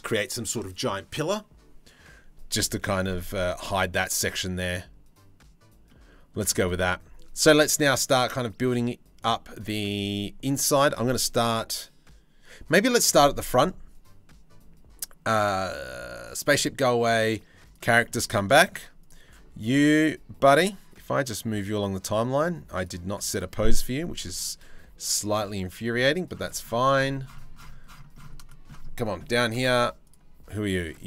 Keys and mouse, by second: 2.9-3.6 middle drag, 4.0-5.5 middle drag, 5.9 shift+middle drag, 6.2 middle click, 6.5-16.0 middle drag, 16.1-17.3 middle drag, 17.3 click, 17.7 middle drag, 18.2 shift+right click, 18.6 click, 21.1 click, 22.4 click, 25.3 click, 29.6 click, 30.1 click, 30.9-31.0 drag.